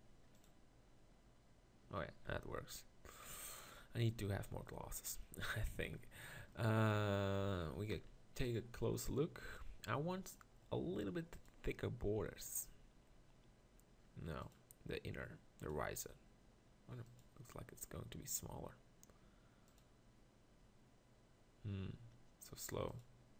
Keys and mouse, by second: 2.2 z, 3.3 z, 4.4 z, 5.8 z, 7.0 z, 8.0 ctrl+KP_Decimal, 14.5-15.3 drag.